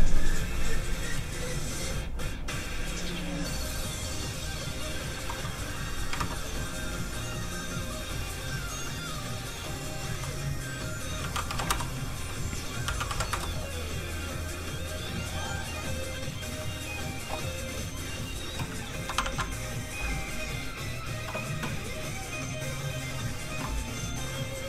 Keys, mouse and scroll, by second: 5.1 ctrl+KP_4, 5.4 click, 6.1 Return, 7.7 click, 8.9 click, 11.2 KP_2, 11.3 KP_5, 11.4 KP_5, 11.5 KP_6, 11.7 Return, 12.0 click, 12.8 KP_2, 13.0 KP_6, 13.3 KP_6, 14.3 click, 19.2 ctrl+shift+s, 19.6 click, 19.8 click.